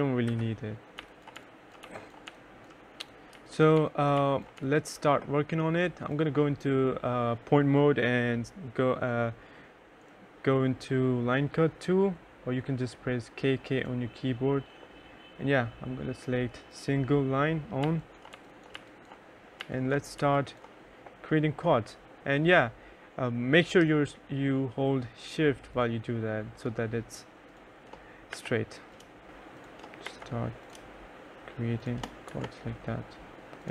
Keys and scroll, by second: 0.1-4.5 typing, 17.0-19.5 typing, 27.7 Escape, 29.3 Escape, 30.3 Escape, 31.5 Escape, 32.3 Escape, 33.6 Escape.